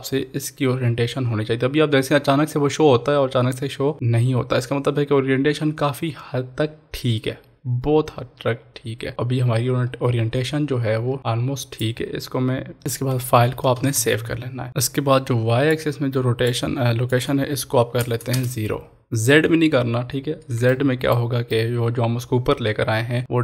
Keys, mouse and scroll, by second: 9.3-9.6 scroll down 1, 11.1-11.7 scroll up 1, 12.8 middle click, 13.8 ctrl+s, 14.7-15.6 scroll down 1, 15.7 click, 20.5 click, 20.8-23.4 shift+middle drag.